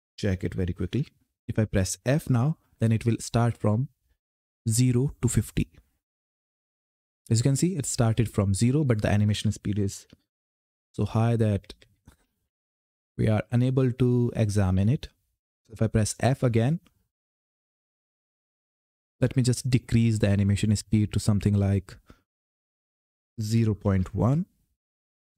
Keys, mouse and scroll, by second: 0.6 ctrl+F10, 5.8 f, 9.8 ctrl+F10, 10.7-15.0 typing, 17.0 f, 18.9 f, 20.3 click, 21.1-21.6 scroll down 1, 22.2 click.